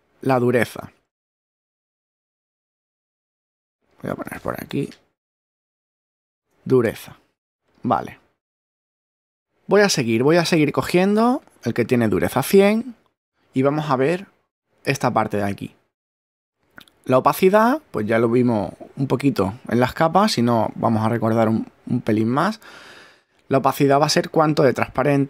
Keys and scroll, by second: 5.0-6.1 typing.